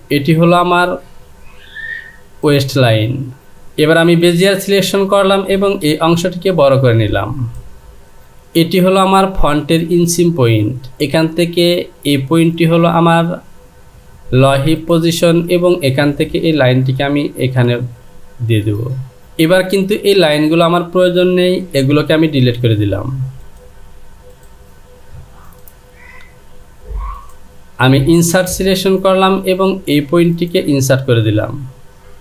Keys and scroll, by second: 5.9 Return, 21.8 Delete.